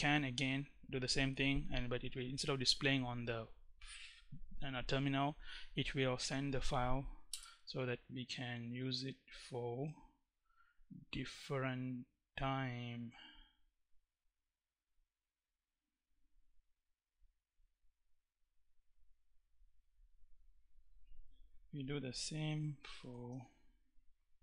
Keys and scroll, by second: 6.9 Return, 21.1 Up, 22.6 shift+., 22.9 space.